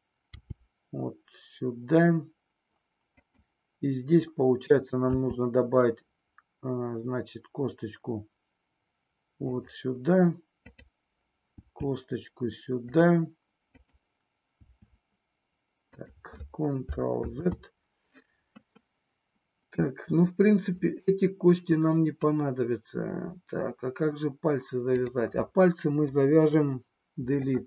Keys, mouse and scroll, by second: 0.3 g, 3.3 click, 5.1 e, 9.5 click, 10.7 click, 11.6 e, 13.7 click, 14.6 e, 17.2 ctrl+z, 24.8 click, 26.2 Delete.